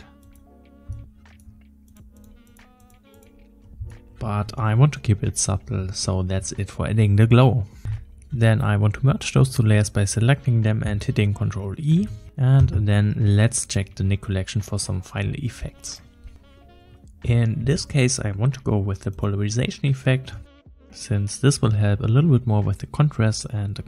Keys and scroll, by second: 7.8 ctrl+z, 12.0 ctrl+e, 17.9 \, 20.4 \.